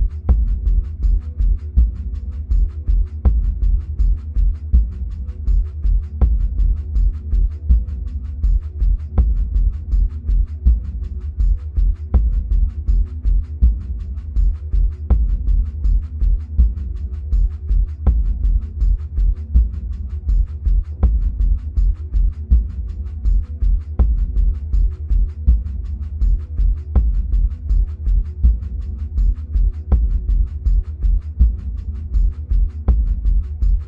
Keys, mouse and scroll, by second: 10.9-13.2 middle drag, 13.2 click, 23.3 drag, 26.6-28.1 middle drag, 28.1 click, 29.5-31.0 scroll up 1, 31.0 click.